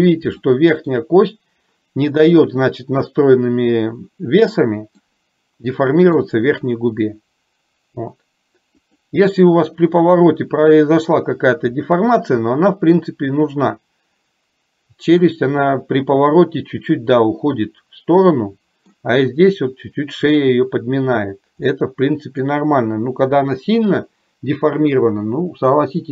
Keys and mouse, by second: 0.6 shift+middle click, 5.2-6.3 middle drag, 9.1 click, 18.4 middle click, 21.8 middle click.